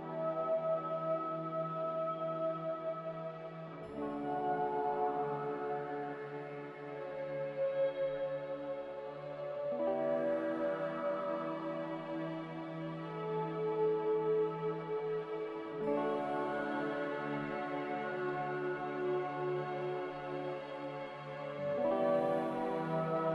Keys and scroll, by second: 3.0 z, 7.3 Delete, 9.4 a.